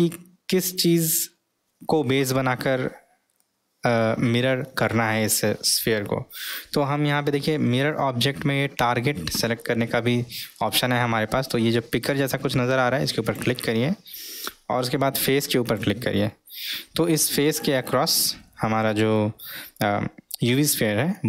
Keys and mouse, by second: 13.2 click.